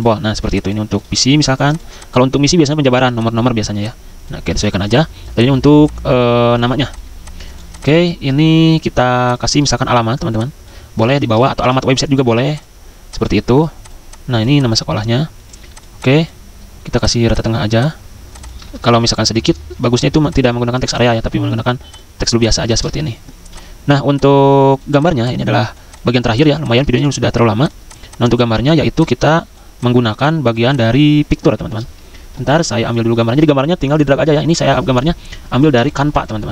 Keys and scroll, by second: 8.0 ctrl+a, 10.9 ctrl+x, 11.1 ctrl+a, 11.6 ctrl+v, 18.6 ctrl+a, 19.1 ctrl+c, 19.3 ctrl+x, 19.7 Escape, 20.9 Delete, 22.8 ctrl+v, 26.9 c.